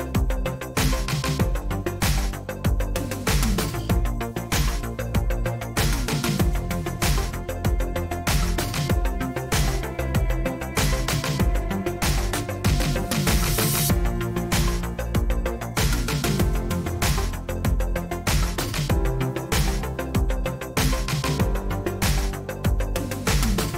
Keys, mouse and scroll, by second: 3.7 Return, 7.1-8.6 typing, 11.3-13.3 typing, 13.5 Return, 16.7 click, 17.9-20.1 drag, 21.2 click.